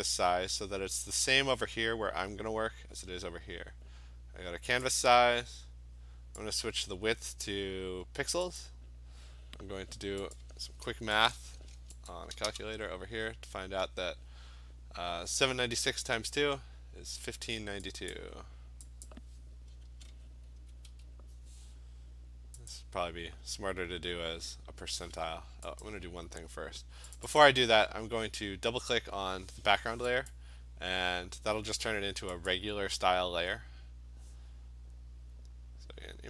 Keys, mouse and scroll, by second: 3.6 click, 4.9 click, 6.6 click, 8.6 click, 10.4 click, 11.3 click, 12.1 click, 18.1 click, 19.1 click, 19.7-21.4 typing, 22.7 click, 25.9 click, 27.2 click, 27.5 click, 30.3 click, 32.7 click.